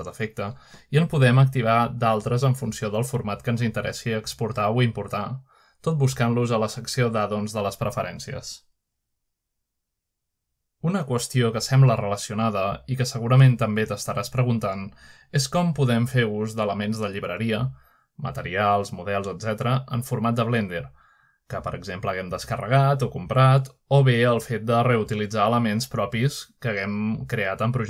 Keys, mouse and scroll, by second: 0.0 click, 1.8 click, 3.7 click, 5.3 click, 6.7 click, 10.0 click, 16.2 click, 21.8-22.5 middle drag, 21.8-22.1 scroll down 1, 24.0-25.2 scroll down 1, 24.6-25.2 middle drag, 25.5-26.2 middle drag.